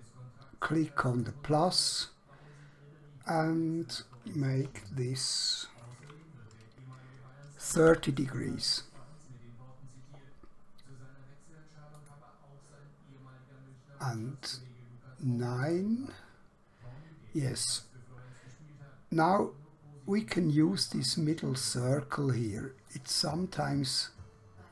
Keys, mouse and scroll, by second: 1.1 click, 7.7 typing, 11.9 click, 15.7 click, 22.8 click.